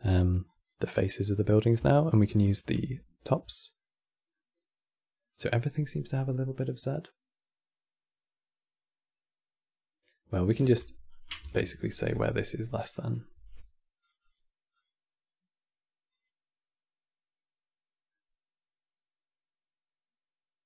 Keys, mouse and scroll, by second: 0.2 click, 0.9 click, 1.9 ctrl+shift+click, 2.1 ctrl+shift+click, 3.2-7.0 middle drag, 10.8 ctrl+right click, 11.2 ctrl+shift+click, 11.5 ctrl+shift+click, 12.2 middle click, 13.1 q, 14.4-17.4 drag, 17.8-20.6 middle drag.